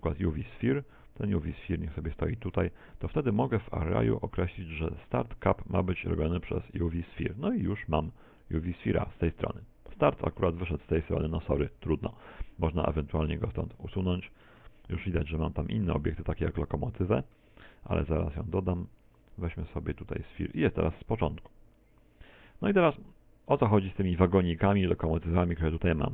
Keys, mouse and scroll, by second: 1.8 click, 2.9 right click, 5.1 click, 7.6 middle click, 13.8 click, 16.0 click, 18.5 click, 23.9 click.